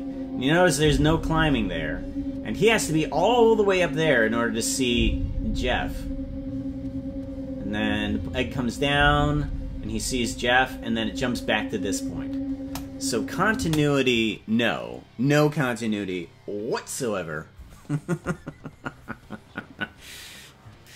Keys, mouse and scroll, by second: 12.6 KP_0, 13.5 space.